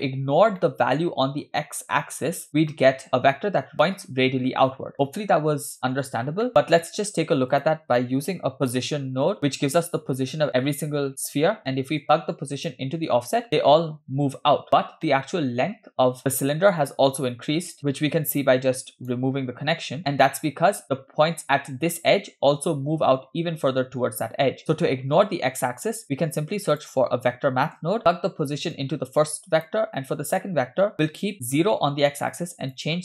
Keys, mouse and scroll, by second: 0.6 shift+middle click, 2.8 middle drag, 6.5 middle click, 6.7 shift+a, 12.0-12.8 drag, 13.5-14.7 middle drag, 13.5-14.0 scroll down 3, 14.7-15.1 scroll down 1, 15.1 middle click, 17.7 right drag, 18.4 ctrl+right click, 26.0 shift+a, 28.0 click, 28.7-29.8 drag, 30.4 middle click, 30.9-32.2 scroll up 2, 32.4-33.0 shift+drag.